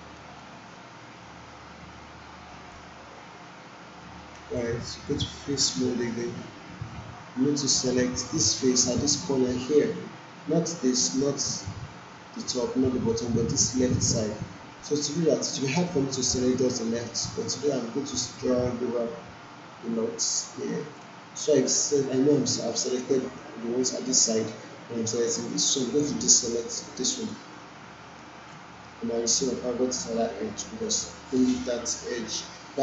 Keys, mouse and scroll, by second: 4.5-5.8 right drag, 17.7-21.1 drag, 26.6 click, 27.3-28.5 ctrl+drag.